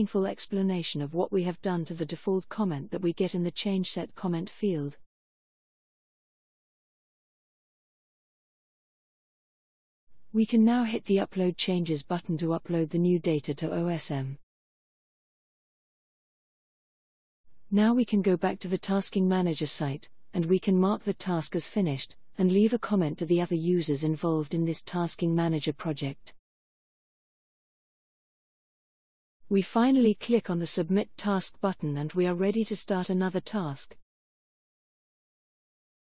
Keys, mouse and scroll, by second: 1.2 click, 2.7 click, 3.3 click, 4.4-8.3 typing, 21.3 click, 22.5 click, 23.9 ctrl+v.